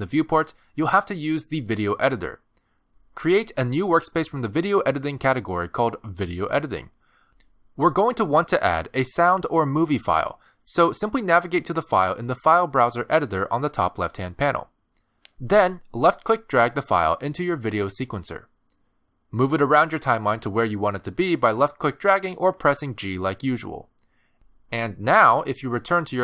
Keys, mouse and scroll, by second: 0.0 click, 0.9 middle click, 1.7 space, 3.2 click.